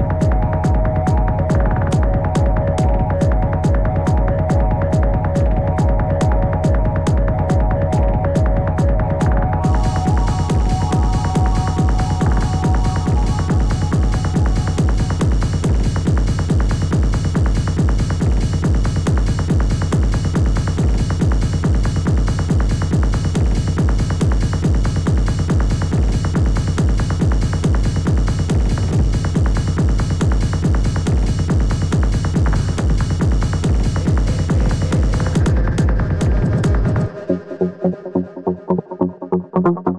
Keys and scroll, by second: 4.6 space, 8.7 typing, 9.4 ctrl+z, 10.8 ctrl+z, 22.5 space, 35.3 ctrl+z, 38.5 space.